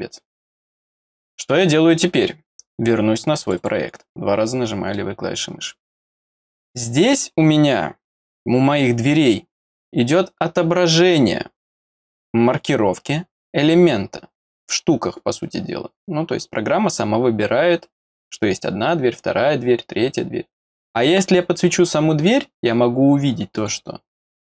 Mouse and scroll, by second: 3.4 click, 3.5 click, 5.9 click, 20.7 click, 22.4 middle click, 23.5 click.